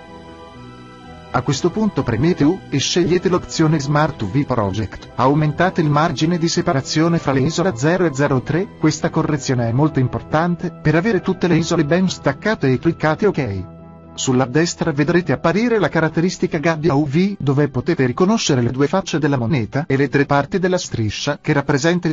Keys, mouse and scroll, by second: 1.2 u.